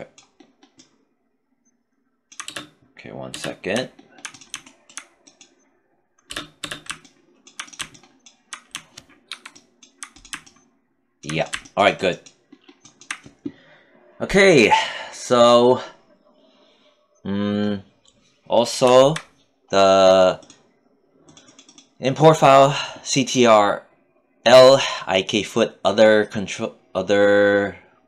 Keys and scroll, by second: 1.8 space, 5.7 space, 8.6 alt+5.